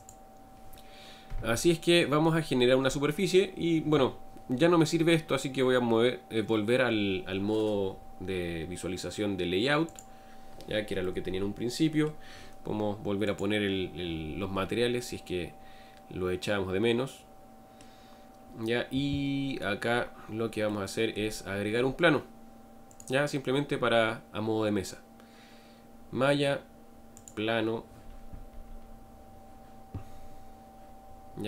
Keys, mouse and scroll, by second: 1.6-7.0 middle drag, 7.0-9.8 scroll down 2, 9.8 click, 10.9-13.2 middle drag, 13.2 click, 14.9-18.3 middle drag, 18.3 scroll down 2, 19.9-20.6 scroll down 1, 20.6-29.8 middle drag.